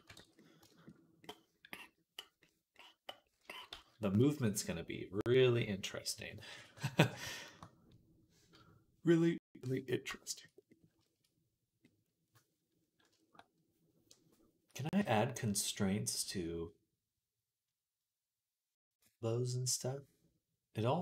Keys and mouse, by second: 0.0 ctrl+s, 3.6 ctrl+s.